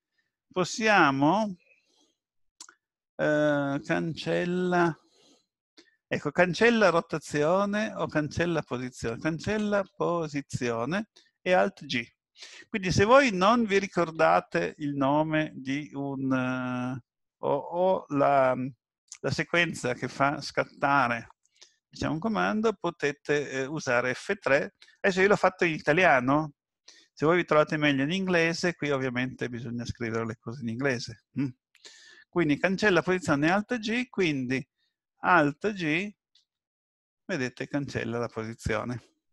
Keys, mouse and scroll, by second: 36.3 alt+g.